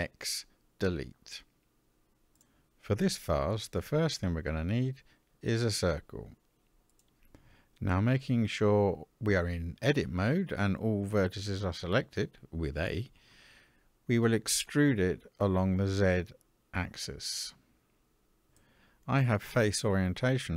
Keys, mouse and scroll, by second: 4.0-6.5 drag, 10.1 Tab, 12.4 e, 17.9 middle click.